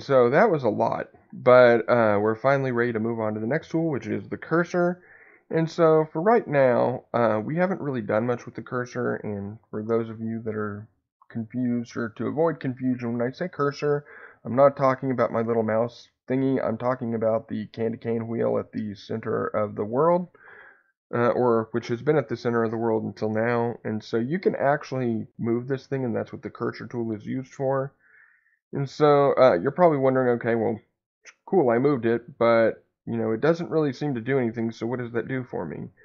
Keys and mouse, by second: 6.6 click, 8.4-9.5 middle drag, 27.2 click, 28.4 click, 30.1 click, 31.2 click, 32.1 click, 32.6-34.0 middle drag, 34.4 click, 35.2 click.